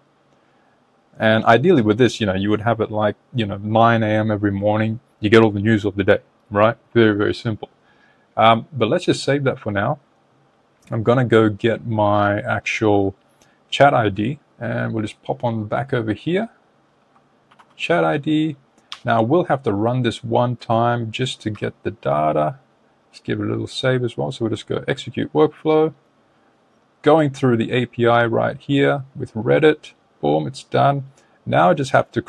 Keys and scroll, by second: 17.3 super+v.